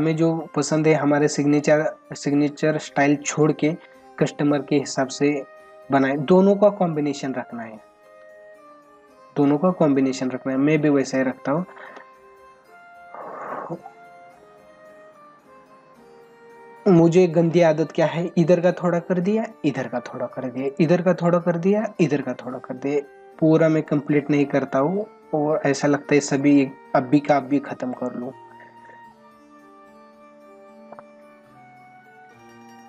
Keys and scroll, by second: 8.1 ctrl+alt+z, 11.1 space, 21.9 space.